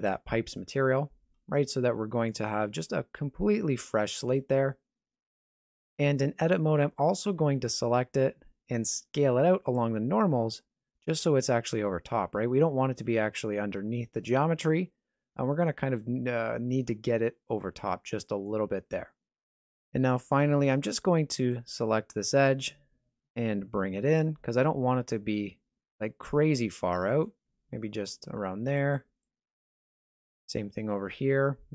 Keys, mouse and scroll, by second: 1.4-1.9 scroll down 2, 1.7 middle click, 2.9 g, 4.9-5.7 scroll up 2, 5.9 shift+middle click, 6.7 scroll up 1, 7.0 Tab, 7.4 a, 9.4 alt+s, 21.3 alt+right click, 22.4 g, 28.8 alt+right click, 29.6 g.